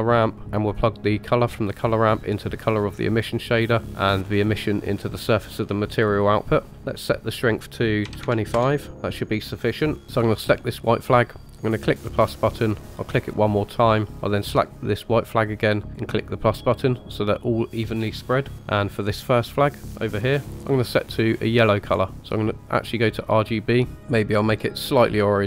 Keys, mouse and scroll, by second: 1.4-2.6 drag, 3.8-4.9 drag, 6.9-8.5 drag, 10.9 click, 12.1 click, 13.0 click, 14.2 click, 15.9-18.8 drag, 19.0 click, 20.4-22.4 drag.